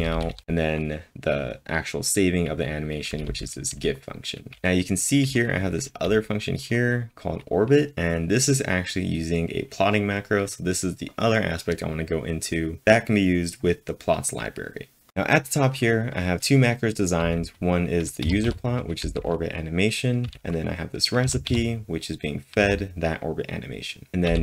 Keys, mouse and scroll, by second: 0.0-0.8 typing, 3.1 typing, 17.2-19.0 typing, 20.2 j, 21.2 w, 22.6 w, 24.2 j.